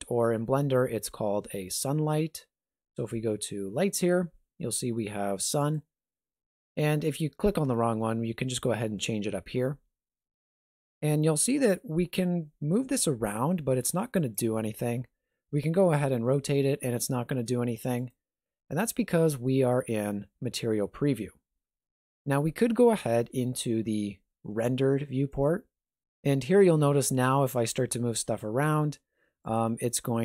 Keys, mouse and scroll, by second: 0.0 shift+a, 12.8 g, 15.2 r, 25.4 click, 26.8 r.